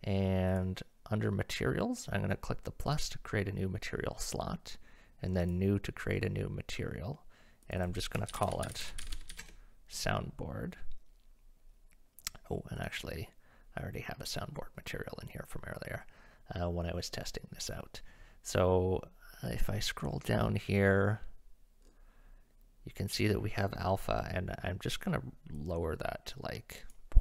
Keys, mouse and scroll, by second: 0.6 click, 5.5 click, 7.6 click, 7.8 right click, 8.2 shift+middle click, 8.4-10.4 right drag, 12.8 right click, 25.6-27.0 right drag.